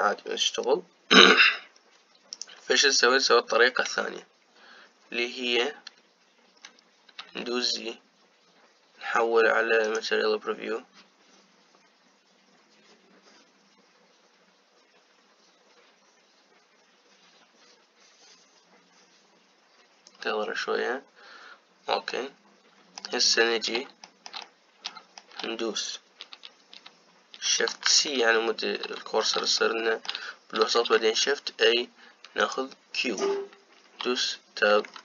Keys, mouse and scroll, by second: 8.1 z, 22.8-24.0 middle drag, 24.0-24.7 scroll down 4, 24.7-28.6 shift+middle drag, 28.6 shift+c, 29.4-30.3 scroll up 4, 30.3-31.4 shift+middle drag, 31.4 shift+a, 34.8 Tab.